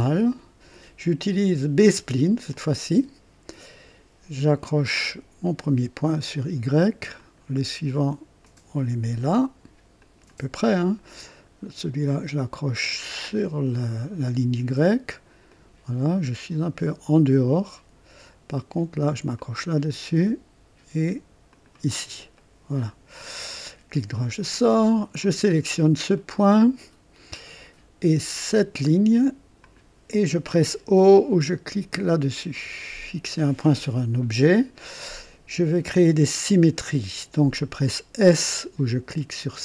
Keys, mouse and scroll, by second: 2.5 click, 5.4 click, 7.2 click, 8.4 click, 10.0 click, 13.1 click, 15.5 click, 17.1 click, 19.3 click, 21.5 click, 22.4 right click, 23.5 right click, 25.2 click, 25.6 scroll up 1, 26.2-27.1 right drag, 29.6 click, 32.5 o.